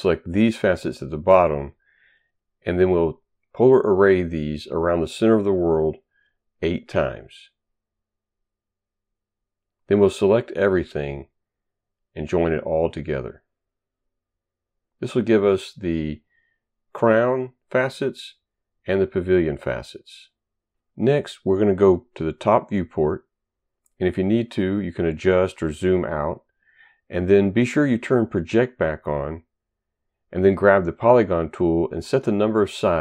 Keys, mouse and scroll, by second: 1.1 right click, 3.1 click, 4.5 Return, 5.7 8, 6.4 Return, 7.7 Return, 8.3 Return, 9.8 ctrl+right click, 10.1 ctrl+right click, 10.8 click, 14.4 click, 15.3 click, 17.0 click, 19.1 click, 24.3 ctrl+right click, 24.6 right click, 28.1 click, 30.6 click, 31.8 click.